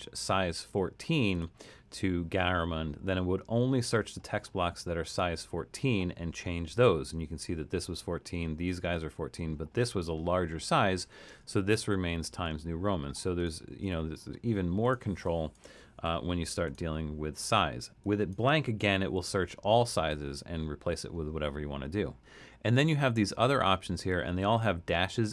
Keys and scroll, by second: 12.5 super+z, 13.7 super+z, 15.9 BackSpace, 18.8 BackSpace.